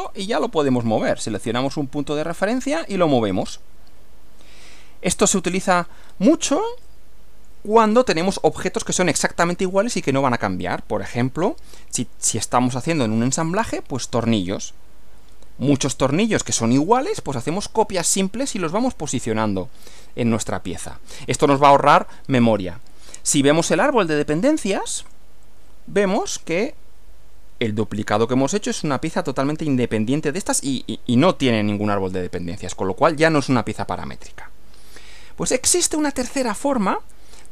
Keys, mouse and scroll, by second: 0.1 click, 2.3 click, 5.6 click, 6.0 scroll down 1, 6.8-7.6 shift+middle drag, 8.2 scroll up 1, 13.3-17.0 middle drag, 20.8 middle click, 23.8 click, 25.0 click, 36.3 click.